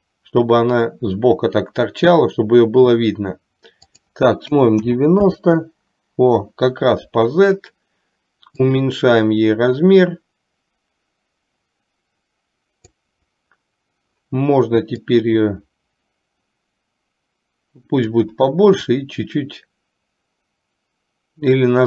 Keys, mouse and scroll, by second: 4.0-5.6 drag, 8.7-13.4 drag, 15.6-18.2 drag, 18.9-21.8 drag.